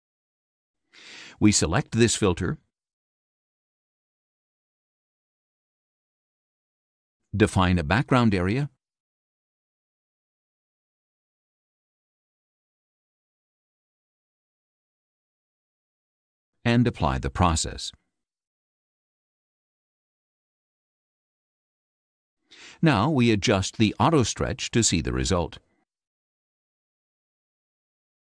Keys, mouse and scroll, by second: 1.4 click, 2.9 click, 3.6 click, 4.5 click, 5.4 click, 6.7 click, 8.7 click, 10.5-11.5 drag, 13.6-15.7 ctrl+drag, 17.3 click, 21.7-22.9 drag, 24.5 click, 25.9 click.